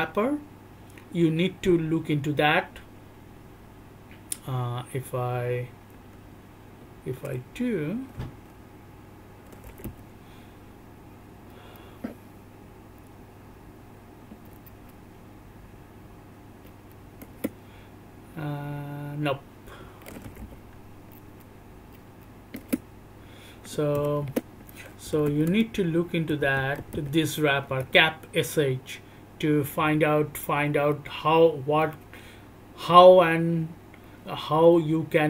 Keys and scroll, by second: 9.8 Return, 11.5 Right, 14.7 Right, 16.6 Right, 17.3 Return, 21.2 Right, 21.9 Right, 22.6 Return, 23.9 c, 24.2 Return, 25.0 m, 25.2 m, 25.4 m, 26.5 m, 26.8 m, 27.6 Return, 31.0 alt+o, 31.0-35.2 typing, 31.8 alt+o, 32.2 alt+o, 32.4 alt+o, 34.2-35.2 alt+o.